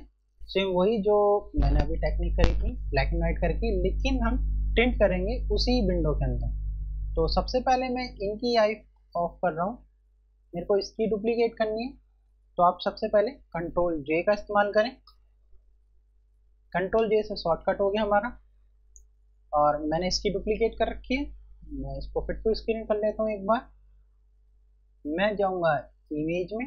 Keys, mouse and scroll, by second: 8.1 click, 13.6 ctrl+Num_Lock, 25.0 F1, 26.0 click.